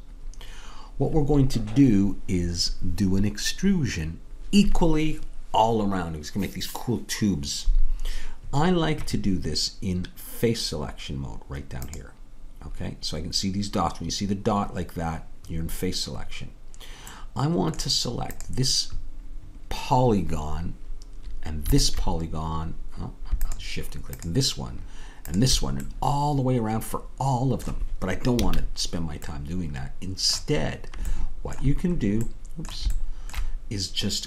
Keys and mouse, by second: 12.0-17.2 drag, 17.2-20.3 middle drag, 22.6-26.1 drag, 26.1 middle click, 26.8-28.4 drag, 28.4 a, 30.4-34.2 middle drag.